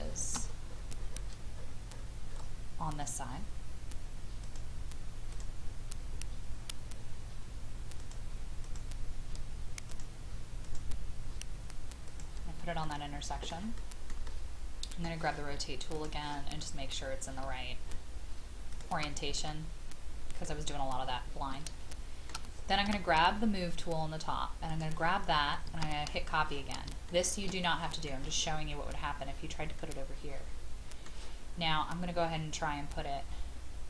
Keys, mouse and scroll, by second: 0.7-4.4 scroll up 1, 4.5 click, 12.8 scroll up 1, 12.9-15.9 middle drag, 15.9-17.0 drag, 18.7 shift+click, 19.3 click, 20.7-21.2 scroll down 1, 21.5 shift+middle click, 22.8 shift+m, 24.7 click, 28.4 scroll up 1, 29.6 scroll down 1, 29.8-31.2 middle drag.